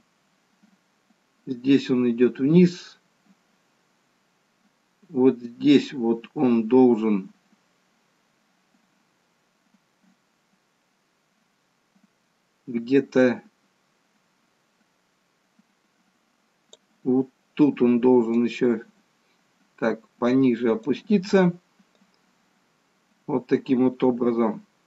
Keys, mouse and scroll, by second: 18.5 click, 21.9 click.